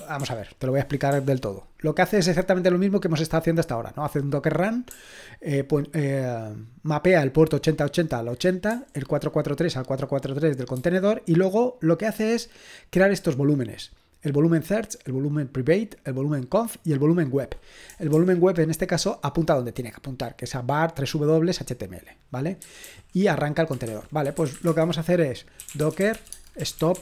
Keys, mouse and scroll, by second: 0.0-1.1 typing, 18.1 typing, 22.8-27.0 typing.